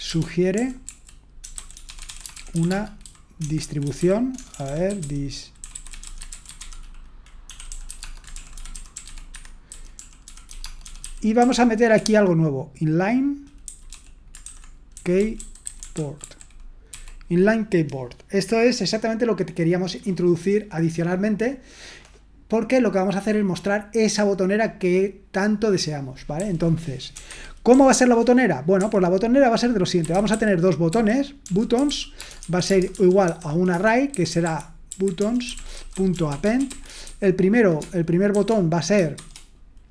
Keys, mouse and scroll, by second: 0.0-11.9 typing, 15.0-16.9 typing, 27.7 typing, 28.8 typing, 30.9-39.9 typing.